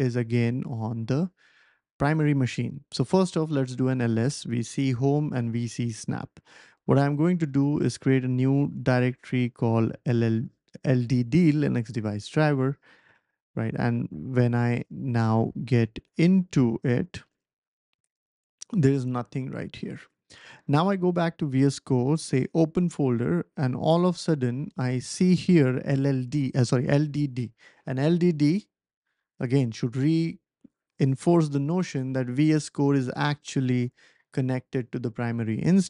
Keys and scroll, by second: 1.1 typing, 2.8-3.8 typing, 6.4-7.9 typing, 9.6-11.0 typing, 12.9 Return, 15.0-18.8 typing, 20.8 typing.